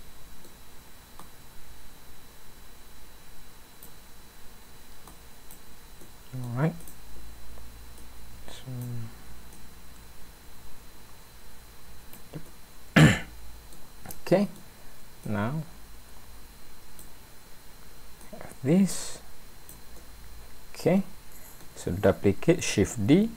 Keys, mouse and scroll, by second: 1.2 click, 5.1 click, 6.0 middle click, 6.8 click, 8.0 click, 9.5 click, 12.5 middle click, 14.1 middle click, 15.2 click, 18.2 click, 20.0 middle click, 22.8 shift+d.